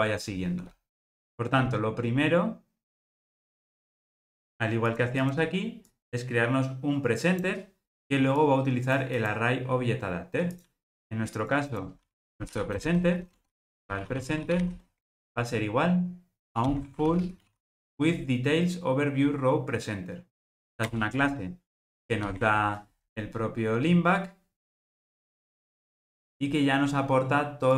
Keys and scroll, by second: 21.2 Return.